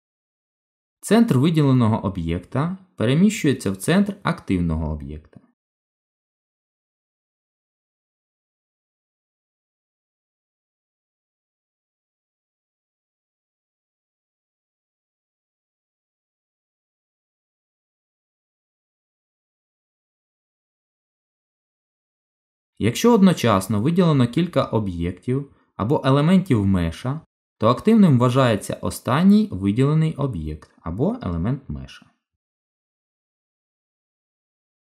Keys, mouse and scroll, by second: 5.7 z, 9.3 ctrl+z, 10.1 middle click, 11.8 click, 13.9 shift+a, 18.6 g, 23.5 click, 25.6 shift+click, 33.3 shift+s.